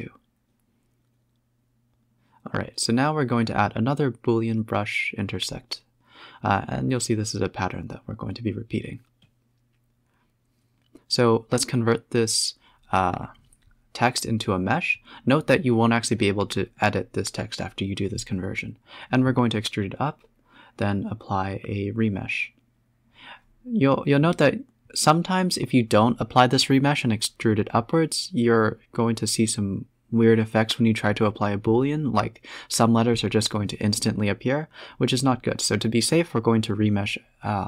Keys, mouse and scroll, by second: 0.0 click, 1.4 shift+a, 2.6-5.7 typing, 6.4-6.9 scroll up 3, 6.9 z, 7.3-8.0 middle drag, 8.0 s, 9.0 scroll up 2, 9.2 z, 9.5 scroll up 4, 9.9 click, 11.1-13.4 drag, 14.4 scroll down 2, 14.5 Tab, 14.6-15.0 scroll up 1, 15.0 a, 15.4 e, 16.3 Tab, 16.6 z, 16.9 middle click, 18.3 z, 19.1 click, 19.6-21.6 drag, 21.9 click, 22.3 h, 22.6 click, 23.0 middle drag, 23.3 click, 23.9-26.2 drag, 29.2 click, 31.1-32.8 drag, 33.1-33.6 middle drag, 33.6-34.3 scroll up 8, 34.3-34.8 middle drag, 35.2-35.5 scroll down 6, 35.6 middle click, 36.2 scroll down 1, 36.4 scroll up 1, 36.5 middle click, 37.1 KP_0.